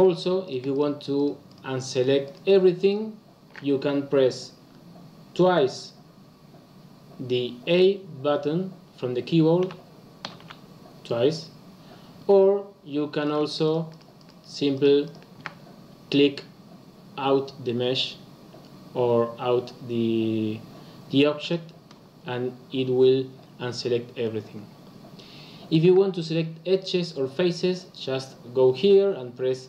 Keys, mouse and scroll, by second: 0.0 shift+click, 0.4 shift+click, 0.7 shift+click, 1.1 shift+click, 1.4 shift+click, 1.9 shift+click, 2.2 shift+click, 2.7 shift+click, 9.6 a, 10.2 a, 10.4 a, 13.2 click, 13.6 shift+click, 13.8 shift+click, 14.1 shift+click, 14.7 shift+click, 15.0 shift+click, 21.3 click.